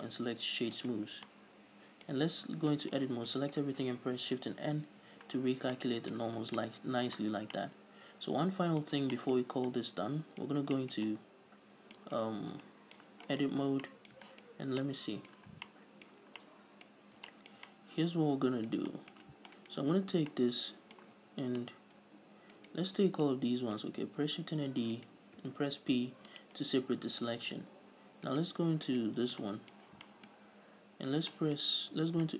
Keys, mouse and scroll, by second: 0.0-1.6 drag, 1.4 scroll down 2, 1.6-6.0 middle drag, 2.8 Tab, 3.4 a, 4.8 shift+n, 5.2 a, 5.6 scroll down 2, 5.8 Tab, 6.5 a, 6.7 scroll down 2, 6.8 a, 6.9 middle click, 7.8-13.6 middle drag, 9.1-9.8 scroll up 4, 10.8 scroll up 2, 13.6 right click, 14.0 scroll down 1, 14.2-19.9 middle drag, 14.9 scroll up 2, 15.8 scroll down 2, 16.6 scroll down 2, 17.3 scroll up 2, 19.9 right click, 20.3 Tab, 20.6-22.9 middle drag, 22.9 alt+right click, 23.3 scroll down 2, 23.6-25.4 middle drag, 24.6 shift+d, 25.4 right click, 25.7 p, 27.2 scroll up 1, 28.6 right click, 29.0 Tab, 29.2 right click, 29.5 scroll down 1, 29.7-32.3 shift+middle drag, 30.7-31.6 scroll up 2, 32.2 Tab.